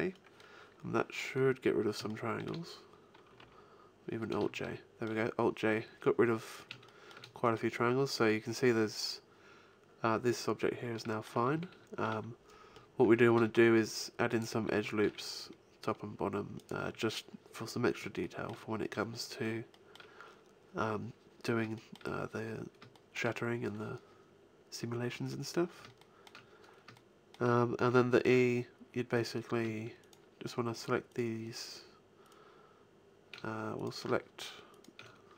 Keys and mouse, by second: 0.3 middle click, 3.4 alt+j, 7.2-9.4 middle drag, 10.9-13.0 middle drag, 11.5 a, 13.3 ctrl+r, 14.4 click, 14.6 a, 15.0 ctrl+r, 15.2 click, 16.6-18.3 drag, 16.9 a, 25.0 middle click, 29.1 click, 29.9-33.1 right drag.